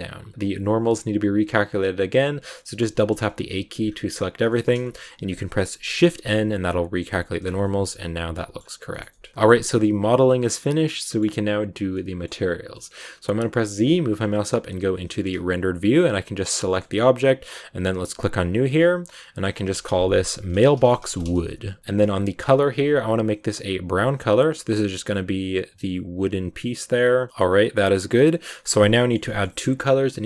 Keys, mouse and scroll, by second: 0.3-1.6 middle drag, 1.6 scroll down 2, 1.8 a, 2.9 middle click, 3.0 scroll up 2, 4.4-5.9 shift+middle drag, 5.9 shift+n, 7.3 Tab, 7.3 scroll down 2, 7.5-8.7 middle drag, 8.7 scroll down 2, 8.8-11.1 shift+middle drag, 11.1 scroll up 2, 11.8-13.7 middle drag, 13.7 z, 15.9 right click, 16.3 scroll up 1, 16.6-18.2 shift+middle drag, 18.2 click, 19.2-21.8 drag, 21.8-22.5 scroll down 9, 22.5 click, 27.3-28.6 middle drag, 28.6-28.9 scroll up 3, 28.9 shift+middle click, 29.4-30.2 scroll up 1.